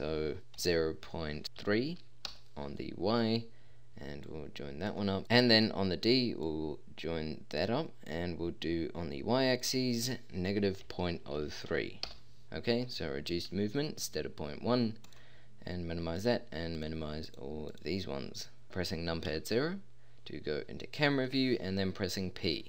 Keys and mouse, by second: 19.3 KP_0, 22.5 p.